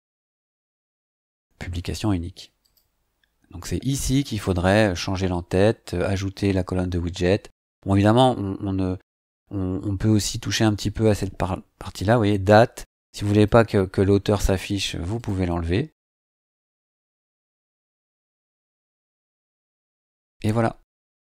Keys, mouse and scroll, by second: 0.3-0.6 scroll down 2, 1.2-1.5 scroll down 2, 2.6 click, 7.0 scroll down 2, 9.5 scroll down 1, 10.2 scroll up 1, 13.3 click, 15.1 click, 16.5 click.